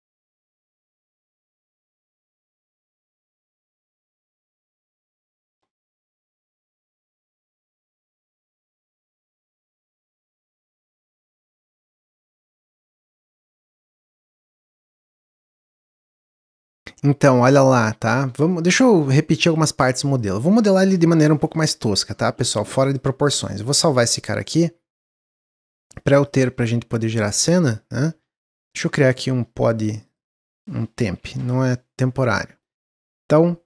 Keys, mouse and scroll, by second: 1.2-4.4 middle drag, 6.6-17.7 middle drag, 17.7 click, 18.5-20.1 middle drag, 20.1-22.2 drag, 22.2 x, 22.8 click, 23.2 click, 23.9 ctrl+s, 24.3-25.9 scroll down 5, 25.9-27.3 drag, 28.2 ctrl+s, 28.7 click, 29.4-29.9 scroll down 3, 29.9 click, 30.0-32.4 drag, 32.4 middle click, 32.7 shift+a.